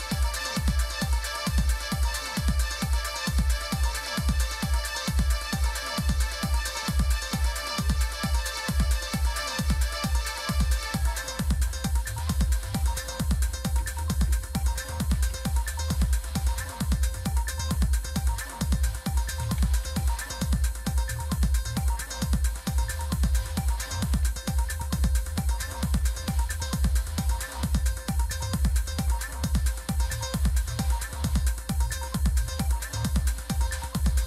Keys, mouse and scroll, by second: 2.5 click, 6.2-7.3 typing, 8.0 Tab, 9.0 Tab, 12.4-15.8 typing, 18.5 Tab, 18.9-22.0 typing, 22.7 Tab, 23.2-27.1 typing, 31.9 click.